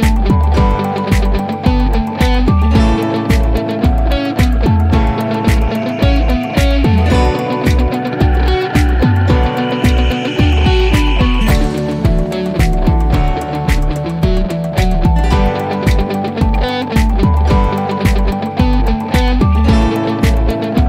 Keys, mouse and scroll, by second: 2.8-3.4 drag, 4.3 1, 7.1 typing, 9.2 click, 11.6 click.